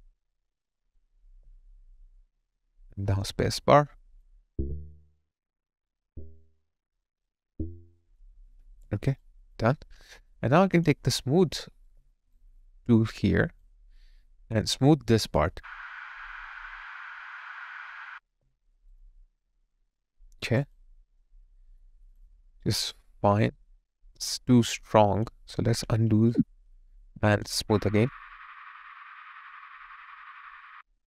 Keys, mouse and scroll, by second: 1.4 alt+middle click, 1.9 alt+click, 8.7 alt+right click, 9.2 alt+click, 11.9 alt+right click, 13.6 ctrl+click, 18.2 ctrl+click, 18.7 alt+right click, 19.0 alt+click, 19.8 alt+right click, 20.7 alt+click, 21.5 alt+middle click, 22.2 alt+click.